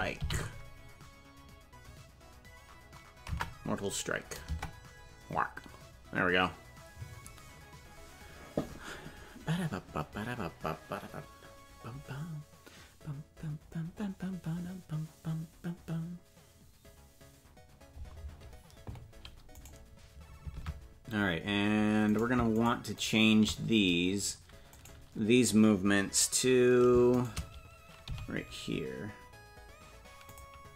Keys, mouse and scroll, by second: 19.7 right click, 20.6 ctrl+Tab, 22.2 right click, 22.6 shift+right click, 24.7 right click, 27.1 shift+right click, 28.0 g.